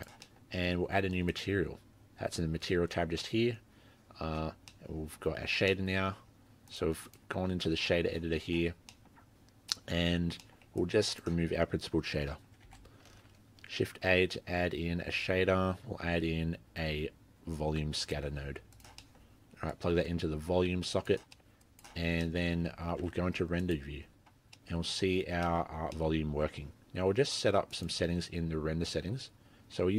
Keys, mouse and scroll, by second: 0.4 middle click, 0.4-0.8 scroll up 3, 1.3 click, 4.5-4.8 scroll down 6, 4.7 scroll up 1, 4.8 middle click, 5.2-5.9 scroll up 6, 5.7 middle click, 6.7 click, 7.1 click, 8.8-9.2 scroll down 3, 8.9 middle click, 9.2-9.7 scroll up 4, 9.7 middle click, 10.2-10.5 scroll down 3, 10.4 middle click, 10.8 click, 12.7 Delete, 13.1 shift+a, 19.0 middle click, 19.2-19.8 scroll up 2, 19.8 click, 21.4 middle click, 21.6 click, 22.3 middle click, 22.6-23.6 scroll down 4, 23.1 z, 24.6 middle click, 24.9 scroll up 3, 25.3 scroll down 1, 25.4 scroll down 1, 25.5 middle click, 25.8 scroll up 2, 26.0 middle click, 27.8 click.